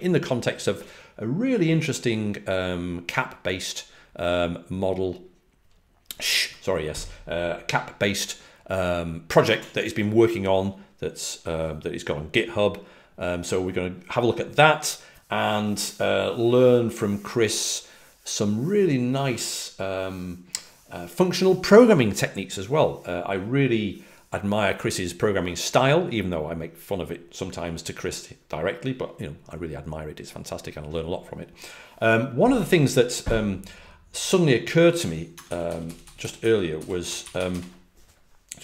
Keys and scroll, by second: 35.3-37.4 typing.